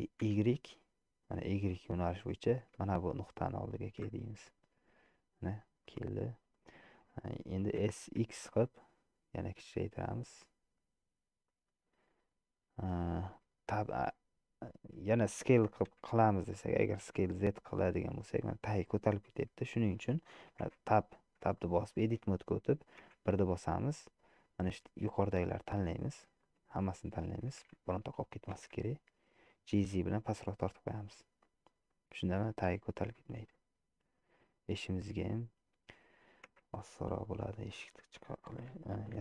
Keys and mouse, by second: 0.0 g, 4.3-5.7 middle drag, 5.9 middle click, 7.0 shift+middle click, 7.9 s, 15.9 s, 20.8 Tab, 21.7 shift+click, 23.2 1, 24.7-25.7 drag, 26.5 shift+click, 28.5 g, 33.5-34.9 middle drag, 36.6 Tab, 37.1 middle click, 38.0 shift+click.